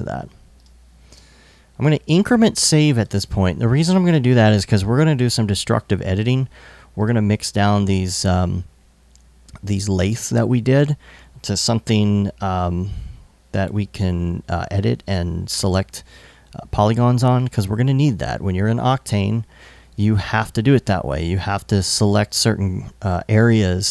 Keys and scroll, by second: 0.7 super+s.